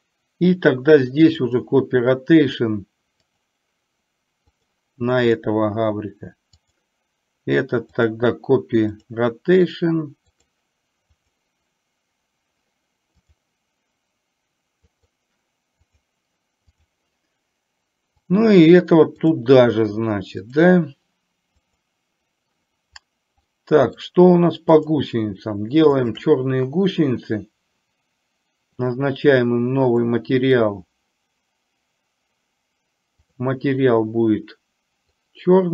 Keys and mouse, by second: 1.5-3.6 drag, 4.6 click, 6.8 click, 8.0-9.3 drag, 10.4 click, 11.3 click, 15.0 click, 16.8 click, 18.4-19.5 drag, 20.5 click, 23.6-24.1 middle drag, 24.9 drag, 26.1 shift+drag, 30.0-31.9 drag, 33.4 drag.